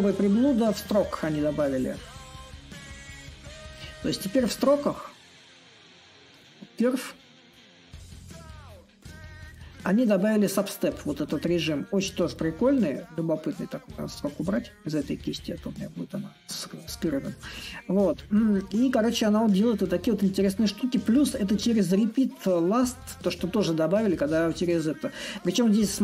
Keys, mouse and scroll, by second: 2.9-8.0 drag, 8.7-13.8 drag, 14.2-15.8 drag, 15.8-20.9 right drag, 21.0-26.0 middle drag.